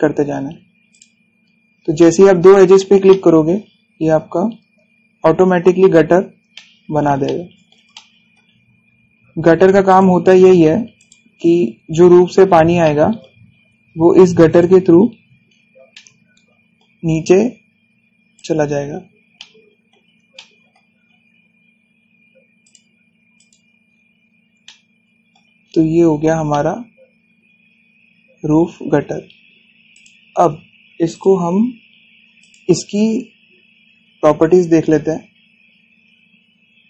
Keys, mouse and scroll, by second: 0.6 scroll up 1, 1.6 click, 2.2 scroll down 1, 2.6 shift+middle click, 3.7 scroll up 1, 4.5 scroll up 1, 6.6 scroll down 1, 7.2 middle click, 7.9-9.4 shift+middle drag, 9.4 scroll up 1, 10.5 click, 12.2 scroll down 1, 13.5 middle click, 14.1-14.5 scroll up 1, 15.2 click, 15.6 scroll down 1, 16.6-17.8 shift+middle drag, 17.8 scroll up 1, 19.0 click, 19.5 scroll down 1, 20.1-21.7 shift+middle drag, 21.7 scroll up 1, 23.3 click, 24.5-25.3 scroll down 1, 25.3 shift+middle click, 26.3 scroll down 1, 27.2-29.6 shift+middle drag, 29.6 scroll up 1, 30.6 click, 36.5-36.8 scroll down 1.